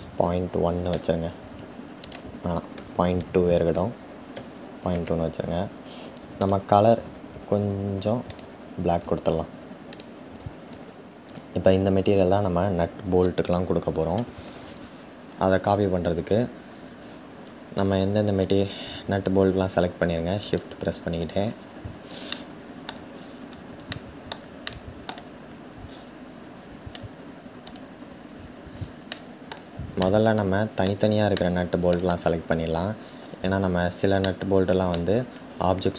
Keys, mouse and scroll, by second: 15.6-17.3 scroll down 4, 17.3-17.8 scroll up 6, 20.1 shift+click, 20.9-21.9 scroll down 6, 21.9-22.7 shift+middle drag, 22.7-23.5 scroll down 1, 23.5-25.4 shift+middle drag, 25.4-26.1 scroll up 8, 26.1-27.3 scroll down 2, 27.3-27.9 scroll down 1, 27.9-28.8 scroll down 3, 28.8-32.6 shift+middle drag, 32.6-33.2 scroll up 1, 33.2-33.9 scroll up 7, 33.9-35.9 middle drag, 35.0-35.9 scroll down 6.